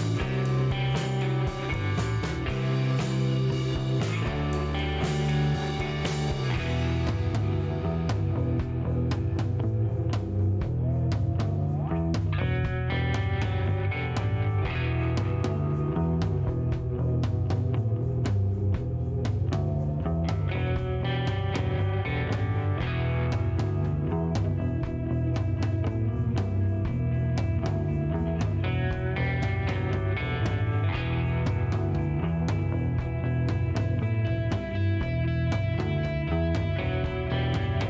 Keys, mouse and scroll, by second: 1.6 click, 3.2 ctrl+click, 4.6 click, 6.3 scroll up 1, 7.7 click, 10.0 click, 11.1 click, 11.9 click, 12.1 space, 13.4 shift+right click, 14.2 shift+scroll up 1, 15.1 shift+right click, 18.4 shift+right click, 19.2 shift+middle click, 20.1 scroll up 1, 20.7 middle click, 22.0 click, 24.3 click, 25.7 shift+right click, 26.5 shift+middle click, 31.4 click, 33.3 click, 35.0 click, 35.9 middle click, 36.5 shift+right click, 37.5 shift+right click.